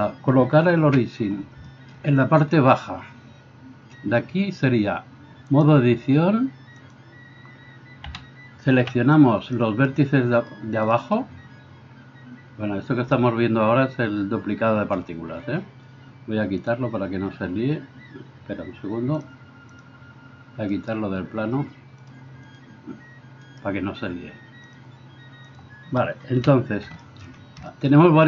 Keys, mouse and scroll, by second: 0.9 KP_1, 8.1 a, 8.8 b, 16.8-19.2 middle drag, 19.2-22.1 drag, 20.7 middle click, 20.7 right click, 22.1 middle click, 22.5-23.5 drag, 23.5-24.8 right drag, 24.8-28.2 drag, 26.4 KP_1.